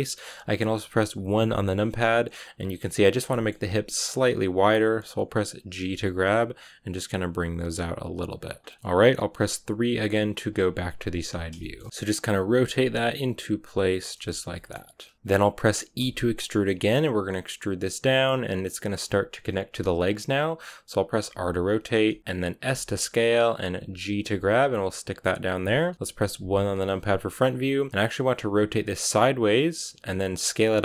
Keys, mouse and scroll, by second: 1.3 KP_1, 3.2 shift+middle click, 4.0-5.6 scroll up 1, 5.6 scroll up 1, 5.7 g, 8.8-10.3 scroll down 1, 10.3 KP_3, 11.3 scroll down 1, 11.5 shift+middle click, 12.4 r, 14.1 scroll down 5, 14.4 shift+middle click, 15.1-15.9 scroll down 1, 15.9 e, 21.1 r, 22.5 s, 24.0 g, 26.3 KP_1, 27.3-28.1 scroll up 1, 28.1 r, 30.3 s.